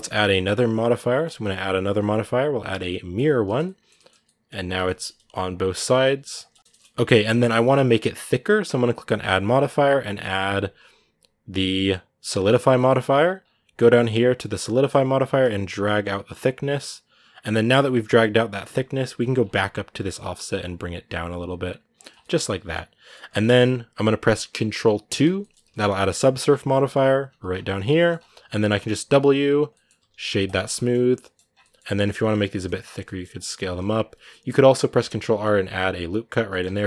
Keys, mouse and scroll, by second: 0.1-3.0 middle drag, 3.0 click, 3.2 shift+middle click, 3.9 scroll down 1, 4.0 middle click, 4.3-4.6 scroll up 1, 4.6 middle click, 5.0 r, 6.5 middle click, 7.3-8.3 scroll up 1, 12.5-15.0 middle drag, 15.0-21.9 shift+drag, 21.9 scroll down 2, 22.0-24.9 middle drag, 24.9 ctrl+2, 25.2-27.9 middle drag, 27.9-28.3 scroll up 1, 29.5 scroll down 1, 29.5 middle click, 30.3 w, 30.5 scroll up 1, 30.5 middle click, 31.3 scroll down 2, 31.4 middle click, 31.8 Tab, 36.3 middle click, 36.4 Tab, 36.6 middle click.